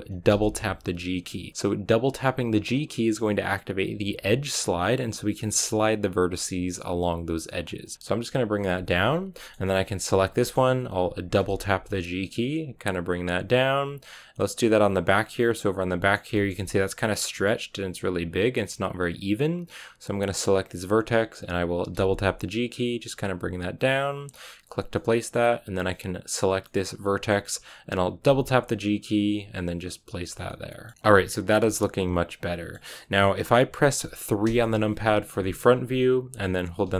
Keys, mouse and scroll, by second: 0.2 g, 8.8-10.0 middle drag, 10.0 right click, 10.2-11.3 middle drag, 11.3 g, 14.3-20.5 middle drag, 20.5-21.9 right drag, 21.9 g, 24.8-26.2 middle drag, 26.2 right click, 26.5 middle click, 27.3-28.1 scroll up 1, 28.1 scroll up 1, 28.2 g, 30.2 scroll down 3, 30.4-34.3 middle drag, 34.3 KP_3, 35.3 shift+middle click, 35.5 scroll up 2.